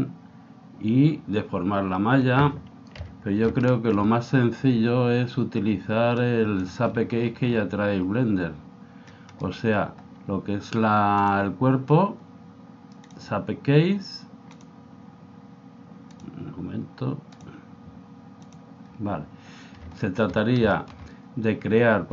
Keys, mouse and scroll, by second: 3.0 KP_1, 3.7-5.4 middle drag, 6.2 click, 6.9-9.4 middle drag, 9.4-11.4 right drag, 11.2 click, 20.0-22.1 middle drag.